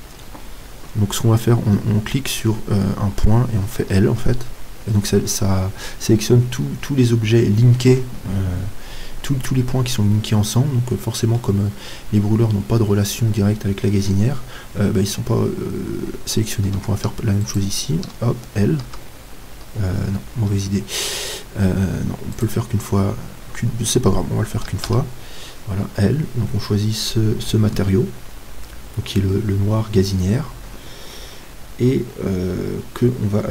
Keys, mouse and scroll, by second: 4.2 l, 8.7 middle click, 9.3-10.1 scroll up 1, 10.1-10.7 scroll up 1, 10.7-17.5 middle drag, 17.5-25.0 right drag, 18.9 l, 25.0 l.